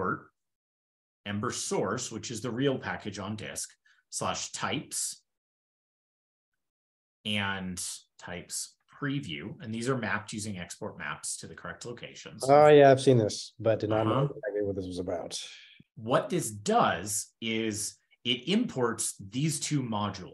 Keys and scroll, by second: 6.4 ctrl+e, 6.7 shift+super+d, 7.0 ctrl+b, 7.2 ctrl+b, 9.2 ctrl+e, 9.4 ctrl+e, 9.4 ctrl+n, 16.6 super+w, 17.4 super+d.